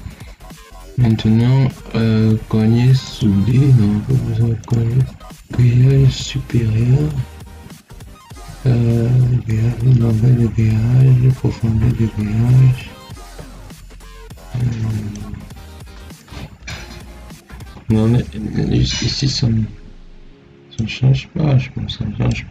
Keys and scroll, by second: 17.6 2.